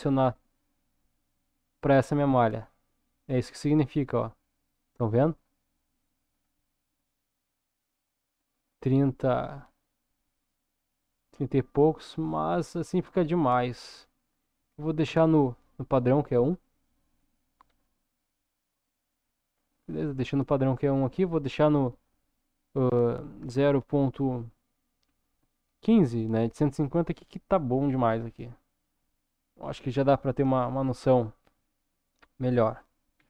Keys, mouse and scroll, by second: 6.9-11.9 middle drag, 13.6-16.6 drag, 17.7 scroll down 1, 18.4 middle click, 19.6 scroll up 1, 21.1-26.9 drag, 27.9 scroll down 2, 30.5 KP_0.